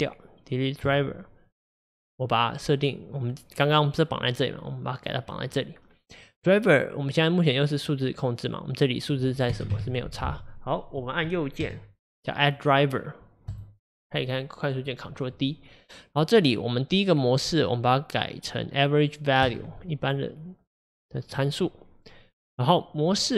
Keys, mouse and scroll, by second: 6.9-19.6 drag.